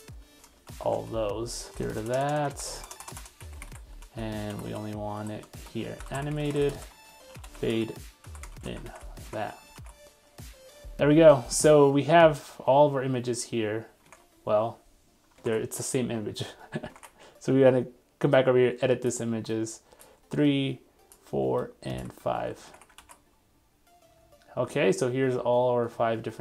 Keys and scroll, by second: 0.7 super+Return, 1.7 super+z, 8.8 super+s, 9.4 super+Tab, 10.1 super+r, 14.1 super+Tab, 17.0 super+Tab, 22.4 super+s, 22.8 super+Tab, 23.0 super+r.